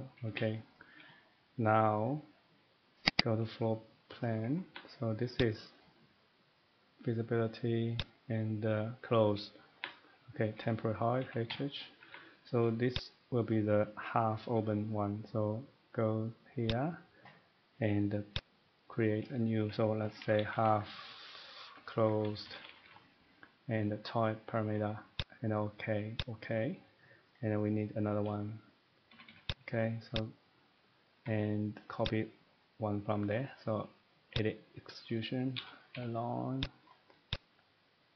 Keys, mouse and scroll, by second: 0.1 Escape, 0.3 Escape, 0.7 middle click, 3.1 click, 3.2 click, 4.1 scroll up 1, 4.3 middle click, 4.4 Escape, 4.8 Escape, 5.4 click, 8.0 click, 9.8 Escape, 10.6 middle click, 11.2 typing, 12.0 Escape, 13.0 click, 16.7 click, 18.1 click, 18.3 click, 20.0-20.4 typing, 21.6-22.8 typing, 28.8-29.1 scroll down 1, 29.1 typing, 29.5 click, 30.2 click, 31.2 Escape, 32.1 click, 32.3 scroll up 1, 33.5 middle click, 34.4 click, 35.6-35.9 typing, 36.6 click, 36.9 scroll up 1, 37.1 scroll, 37.3 click.